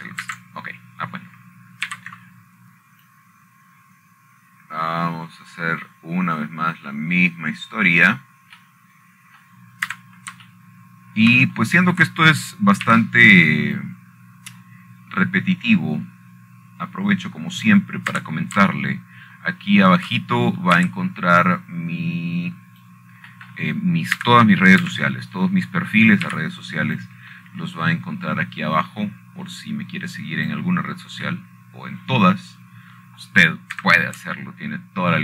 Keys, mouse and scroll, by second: 0.6 alt+shift+click, 3.0 ctrl+z, 4.6 c, 5.8-10.9 drag, 12.2 middle click, 12.6 Escape, 14.3-15.6 shift+middle drag, 15.6 c, 16.5-20.4 drag, 20.9 Escape, 22.6 shift+middle click, 23.5 c, 24.2-25.6 drag, 26.3 middle click, 26.9 Escape, 29.0 c, 29.7-33.3 drag.